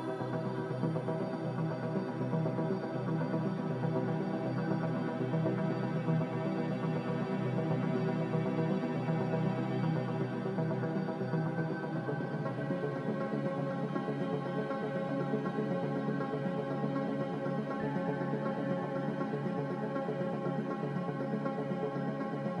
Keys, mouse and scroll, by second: 19.4 b.